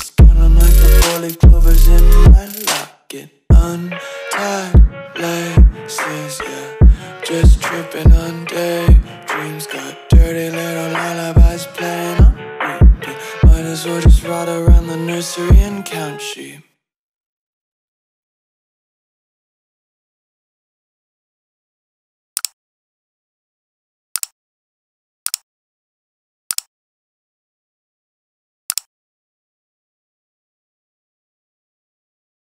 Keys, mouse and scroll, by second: 0.5 ctrl+v, 1.8 BackSpace, 6.3 click, 9.9 click, 17.0 right click, 17.8 click.